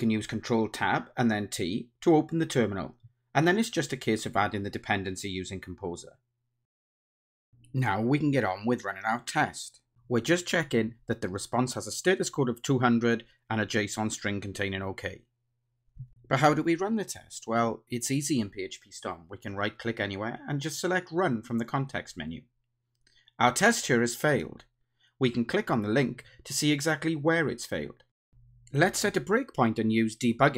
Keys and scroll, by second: 7.9 ctrl+alt+shift+Left, 9.1 Return, 11.3 Return, 15.6 Return, 19.5 ctrl+shift+r.